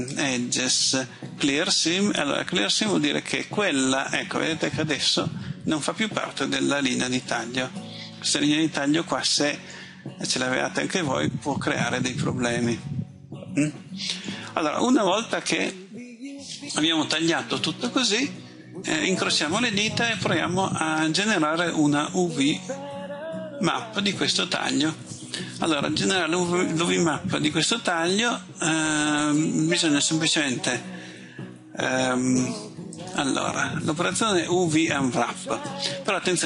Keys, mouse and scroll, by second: 4.6 middle click, 14.4-14.8 scroll up 1, 33.0 click.